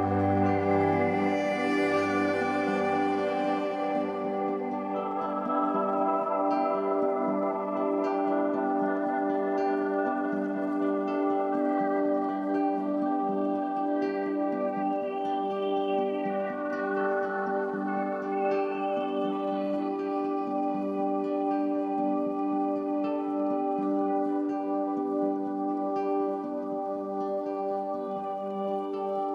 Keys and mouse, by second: 0.3 ctrl+alt+click, 1.9 click, 2.7 click, 3.3 click, 4.8 click, 5.7-7.5 drag, 9.4 click, 12.1 f, 12.8 click, 14.8-16.5 drag, 17.7 ctrl+z, 18.7 click, 19.0 click, 20.1 ., 20.4 5, 20.6 Return, 25.8-28.0 drag, 28.7 click, 29.1 click.